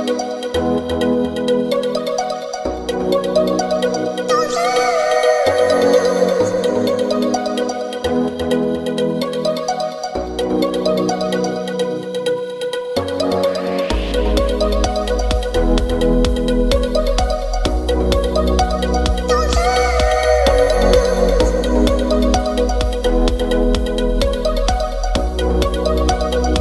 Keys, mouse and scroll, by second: 1.3-9.4 middle drag, 10.3-14.7 drag, 14.7-17.0 middle drag, 17.0-25.8 drag.